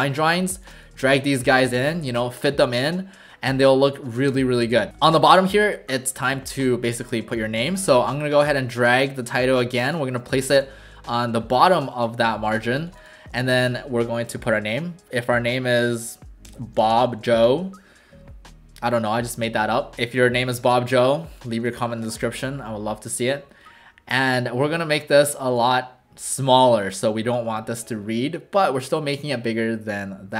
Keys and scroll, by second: 1.2 ctrl+alt+shift+c, 2.0 w, 4.3 w, 7.1 v, 11.3 w, 12.5 w, 13.4 ctrl+a, 15.9-17.8 typing, 19.9 ctrl+a.